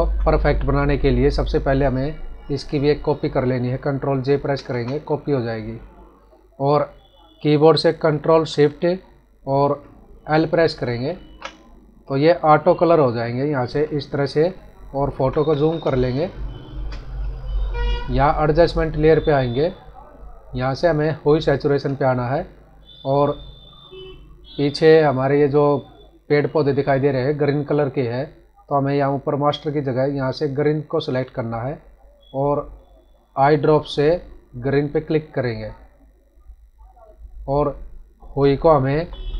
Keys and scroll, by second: 4.5 ctrl+j, 10.9 ctrl+shift+l, 15.1 ctrl+=, 16.1 space, 38.8 ctrl+-.